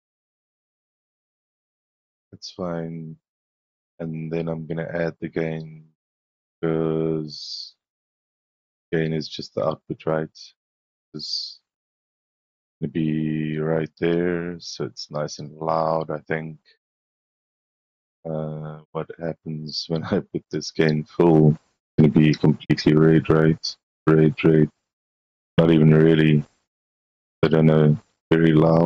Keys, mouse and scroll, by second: 2.7 middle click, 2.7-5.1 scroll, 3.1 middle click, 3.5 middle click, 3.8 middle click, 4.2 middle click, 4.5 middle click, 4.8 middle click, 5.2 scroll up 2, 5.7 scroll up 2, 7.8 middle click, 8.6 middle click, 9.1 middle click, 17.1 click, 18.2 click, 19.8-22.1 drag, 23.4 drag, 24.4-25.5 drag, 27.3-28.8 drag.